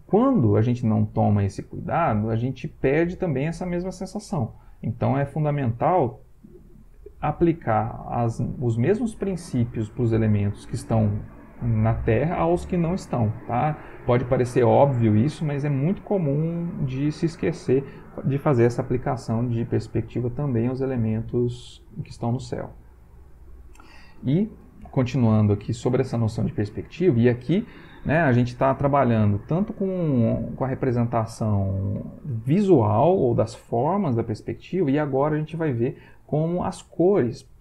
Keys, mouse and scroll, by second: 22.6 Right.